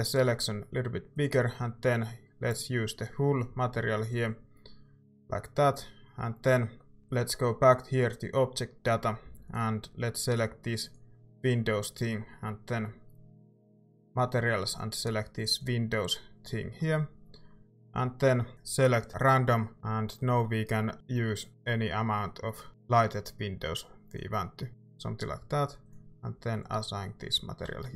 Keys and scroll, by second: 9.2 a, 27.7 Tab.